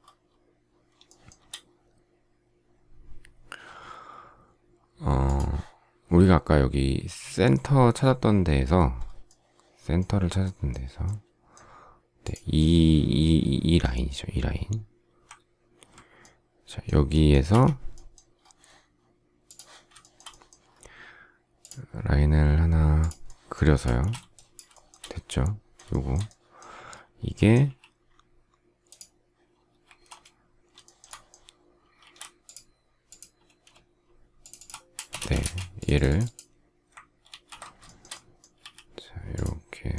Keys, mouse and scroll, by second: 1.0 shift+middle click, 17.4 Escape, 19.9 shift+middle click, 23.8 space, 24.6 shift+middle click, 25.8 shift+middle click, 27.5 q, 29.8 space, 30.8 shift+middle click, 31.9 shift+e, 34.9 space, 37.2 ctrl+g, 37.9 shift+middle click, 38.5 s.